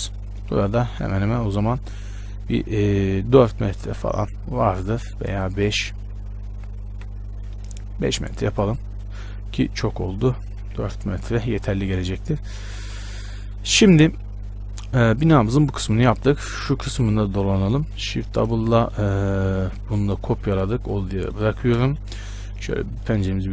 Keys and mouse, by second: 0.7 z, 1.2-4.6 middle drag, 1.4 z, 2.8 e, 9.4 ctrl+z, 10.2 e, 13.0 click, 17.2 z, 18.8 z, 20.7 shift+d, 22.0 shift+space.